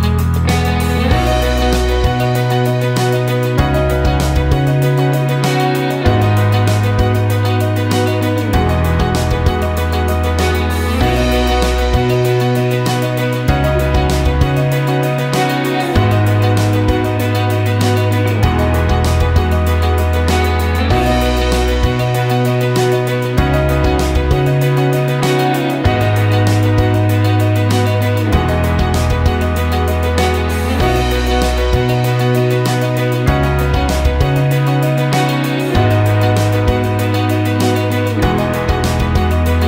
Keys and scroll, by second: 13.7 BackSpace, 15.4-17.3 typing, 19.8-21.2 typing.